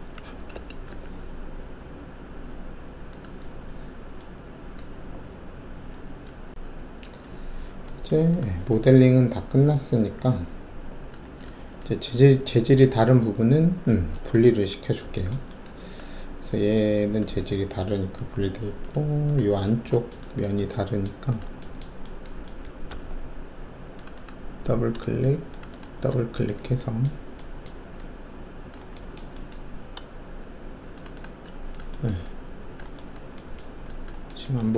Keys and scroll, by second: 0.5-0.8 typing, 22.9 alt+2.